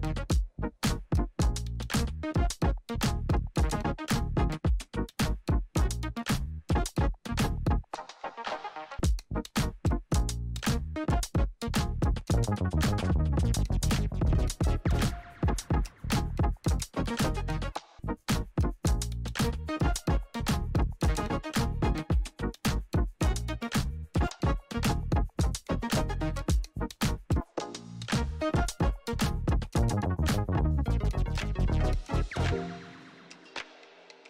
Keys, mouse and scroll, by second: 1.8 click, 6.1 click, 11.3 F4, 12.3 click, 17.4 click, 17.5 click, 19.6 alt+scroll up 1, 21.1 click, 23.6-34.2 drag.